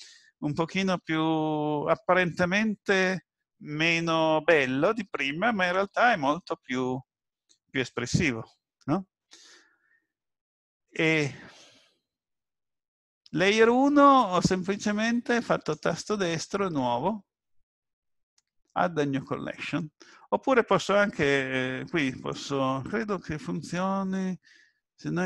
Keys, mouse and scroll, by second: 10.9 click, 14.6 click, 15.5 right click, 22.3 click, 23.6 shift+a.